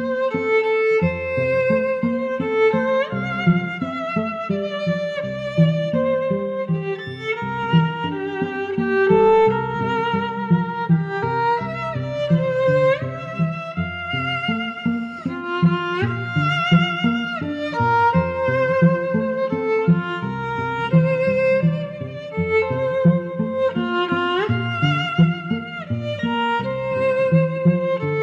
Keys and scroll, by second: 1.9 Tab, 6.3 Tab, 27.6 Tab.